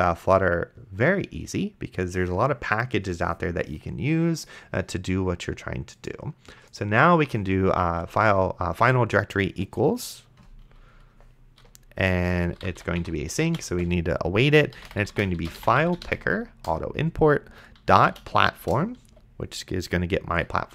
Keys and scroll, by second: 12.4-19.1 typing, 20.5-20.7 typing.